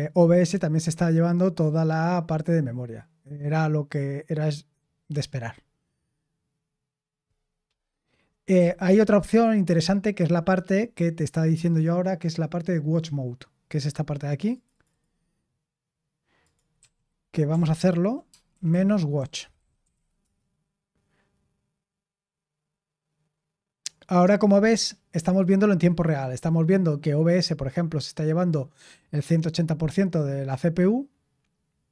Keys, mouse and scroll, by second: 8.5 q, 16.7 click, 16.7 q, 17.7 ctrl+p, 18.2-20.3 typing.